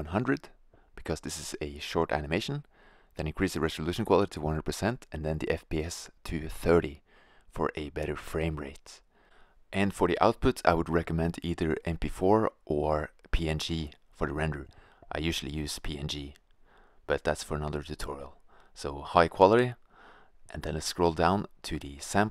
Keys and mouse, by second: 4.8-6.8 drag, 9.0-11.0 drag, 12.2-14.9 drag, 16.0-18.5 drag, 18.5-22.3 middle drag.